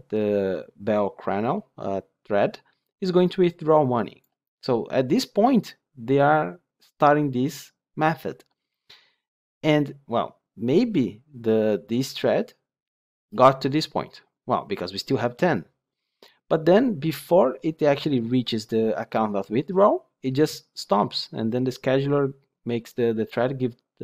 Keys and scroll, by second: 13.1 ctrl+F8.